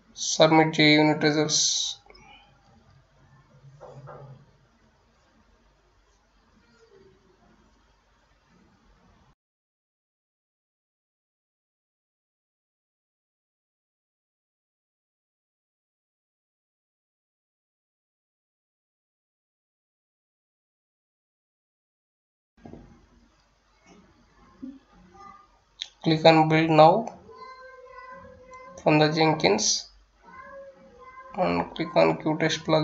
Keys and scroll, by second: 0.0-8.4 typing, 9.7 F9, 20.4 Return, 20.6-25.3 typing.